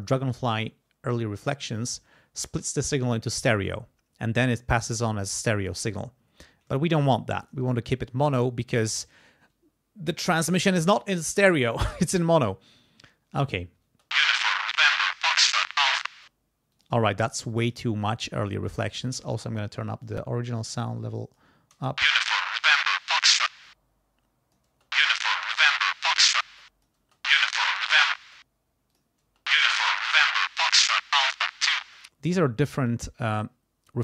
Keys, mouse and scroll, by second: 5.3-7.2 scroll down 2, 7.4 click, 8.8 click, 13.8 space, 16.1 space, 16.7 click, 17.5 click, 18.6 click, 19.8 click, 20.7 click, 21.7 space, 23.5 space, 23.6 click, 24.7 space, 26.4 space, 26.6 click, 28.2 space, 29.2 space, 30.1-31.9 drag, 31.8 space.